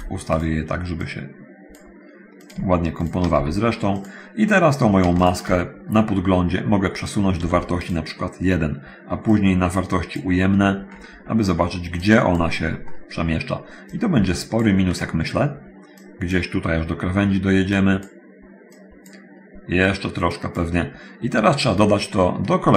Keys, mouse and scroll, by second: 0.5 shift+click, 0.5 shift+g, 1.0-2.1 drag, 2.2-2.9 drag, 3.3 shift+click, 4.0 click, 6.9 click, 8.1 click, 8.1 1, 9.5 click, 11.1 scroll up 1, 12.2 click, 14.1 click, 15.9 click, 17.9 click, 18.7 click, 20.4 click, 21.3 middle click, 22.3 middle click.